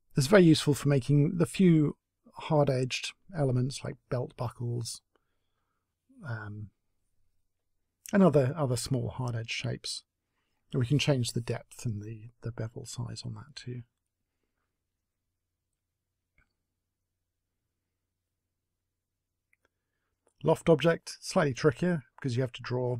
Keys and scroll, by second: 9.8 space, 17.3 Delete, 18.1 Delete.